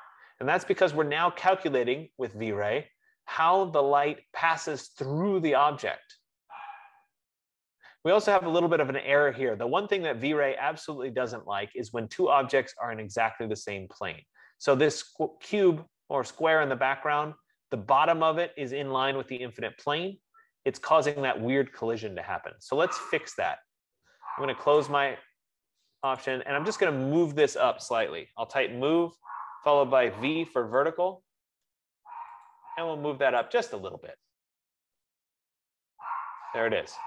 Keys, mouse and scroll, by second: 25.4 click, 26.6 click, 28.4-30.4 typing, 30.7 Return, 32.8 click, 33.6 click.